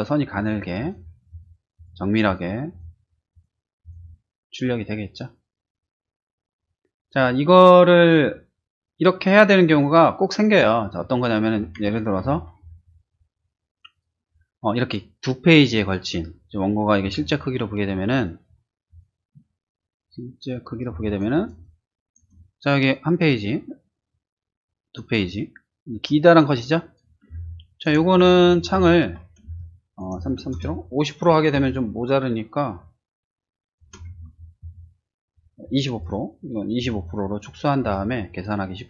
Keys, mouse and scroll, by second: 0.3 click, 0.8 click, 1.3 click, 1.7 click, 2.2 click, 2.7 click, 3.3 click, 3.8 click, 12.2 ctrl+n, 13.9 click, 17.5 ctrl+1, 18.9 click, 20.4 click, 20.9 space, 21.0 click, 21.3 click, 21.6-27.0 drag, 27.3 space, 27.4 click, 28.6 ctrl+-, 29.4 space, 29.6 click, 31.5 space, 31.7-33.8 drag, 34.3 ctrl+-, 36.0 space, 37.9 space.